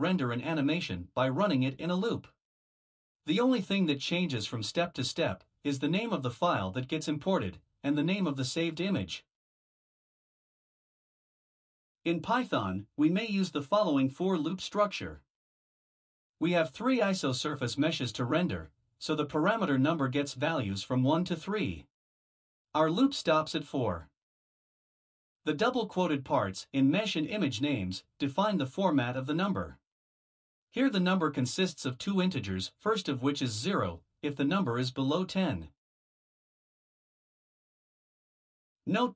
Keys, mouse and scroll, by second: 0.1 click, 0.2 Tab, 0.6 click, 0.7 Tab, 1.2 click, 1.3 Tab, 1.7 click, 1.9 Tab, 2.2 click, 2.3 Tab, 2.6 click, 2.7 Tab, 3.1 click, 3.2 Tab, 3.5 click, 3.6 Tab, 3.9 click, 3.9 Tab, 4.2 click, 4.7 Tab, 4.7 click, 5.0 click, 5.1 Tab, 5.3 click, 5.4 Tab, 5.7 click, 5.8 Tab, 6.1 click, 6.2 Tab, 6.5 click, 6.6 Tab, 7.9 Return, 9.3 Return, 12.4-19.1 typing, 21.1 click, 23.0 shift+2, 23.2 shift+2, 24.5 shift+5, 25.4 0, 27.0 d, 27.2 shift+2, 27.4 shift+2, 28.5 Right, 28.6 Right, 28.8 Right, 28.9 Right, 29.0-30.9 typing, 31.3 Down, 31.7 Left, 32.6-38.4 typing.